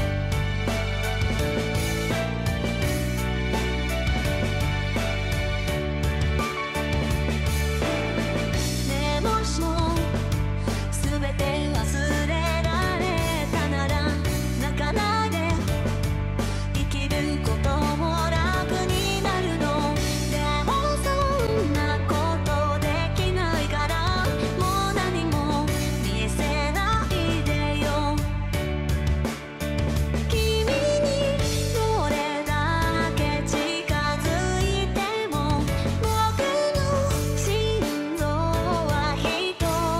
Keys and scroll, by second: 13.2 ctrl+z, 14.0 ctrl+z, 14.4 ctrl+z, 14.6 ctrl+z, 15.2 ctrl+z, 15.8 ctrl+z, 16.1 ctrl+z, 16.4 ctrl+z, 17.9 ctrl+z, 21.4 ctrl+z, 21.8 ctrl+z, 21.9 ctrl+z, 22.0 ctrl+z, 22.3 ctrl+z, 23.0 ctrl+z, 23.2 ctrl+z, 25.9 ctrl+z, 26.1 ctrl+z, 26.4 ctrl+z, 29.1 ctrl+z, 29.2 ctrl+z, 30.0 ctrl+z, 32.8 ctrl+z, 35.7 ctrl+z, 37.6 ctrl+z, 37.8 ctrl+z, 37.9 ctrl+z, 38.2 ctrl+z, 38.7 ctrl+z, 38.7 ctrl+z, 38.9 ctrl+z, 39.5 ctrl+z, 39.8 ctrl+z.